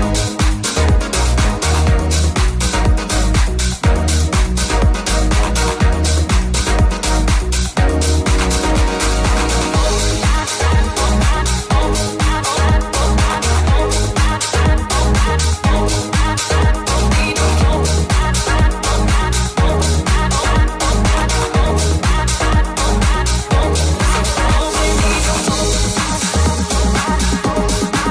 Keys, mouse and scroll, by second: 1.0-7.5 middle drag, 7.5 click, 8.4 ctrl+shift+right click, 9.0-11.4 drag, 9.0 right click, 10.1 h, 10.5 middle click, 10.5 right click, 11.0 Tab, 11.4 middle click, 11.4-12.9 right drag, 11.8 shift+click, 11.8 shift+middle click, 12.1 shift+click, 12.1 shift+middle click, 12.9 click, 13.4-15.7 shift+drag, 15.9 shift+click, 16.5-18.6 right drag, 18.6-19.9 middle drag, 19.9 middle click, 20.0-23.4 shift+middle drag, 21.7 alt+Tab, 22.2 alt+h, 23.5-24.5 alt+shift+middle drag, 24.7 ctrl+middle click, 25.0-26.9 shift+middle drag, 26.2 shift+g, 27.3 middle click, 27.5 ctrl+g.